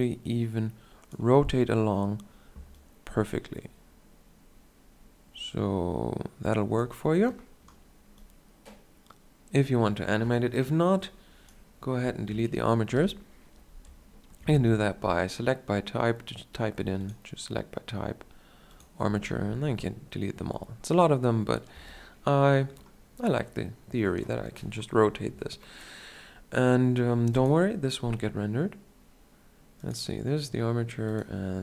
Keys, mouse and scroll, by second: 2.7-4.7 drag, 12.8 KP_1, 14.3 space, 21.6 a, 23.3-25.1 drag, 29.3 KP_Decimal, 30.4-31.6 right drag.